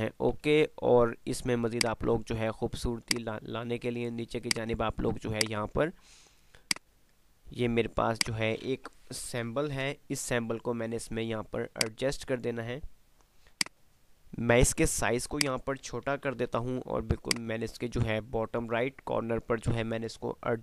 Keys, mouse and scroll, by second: 0.7 F3, 1.7 click, 2.0 F2, 3.0-4.5 drag, 5.7-8.0 drag, 8.0 F2, 8.3 click, 8.5 F2, 10.0 shift+Page_Up, 11.8-15.4 drag, 15.9-17.3 typing, 17.3 click, 17.5 F3.